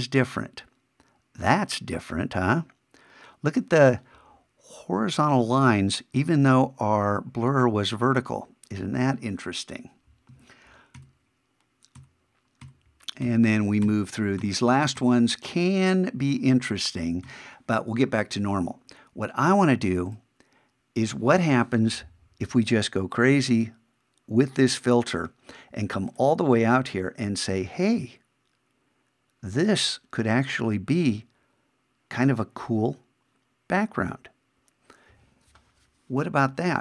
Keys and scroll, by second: 11.0 shift+=, 17.3 shift+=.